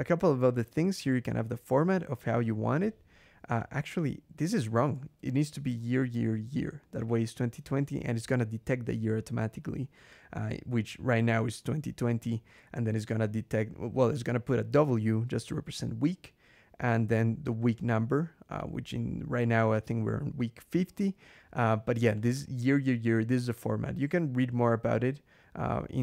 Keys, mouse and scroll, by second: 1.0-2.2 drag, 2.5 click, 3.4-4.6 drag, 5.0 shift+y, 12.9 click, 13.9 click, 16.0-16.9 drag, 17.3 click, 18.4 click, 22.0 click.